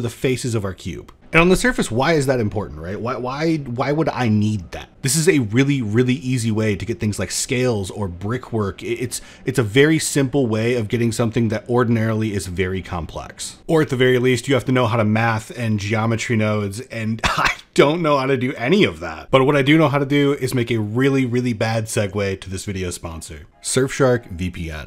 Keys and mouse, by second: 0.1 middle drag, 0.4 shift+middle drag, 0.7 middle drag, 22.5 middle click.